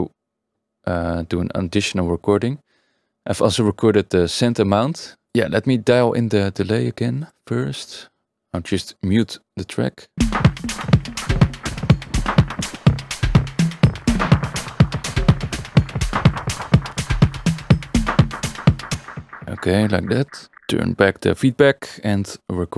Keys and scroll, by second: 5.9 Tab, 7.5 Tab, 18.9 space.